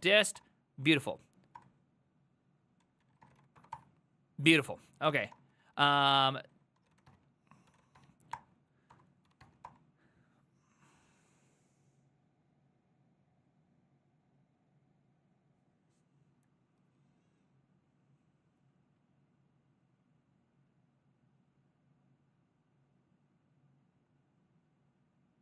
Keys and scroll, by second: 0.0-1.6 typing, 2.8-10.1 typing, 8.4 Return, 8.9 Up.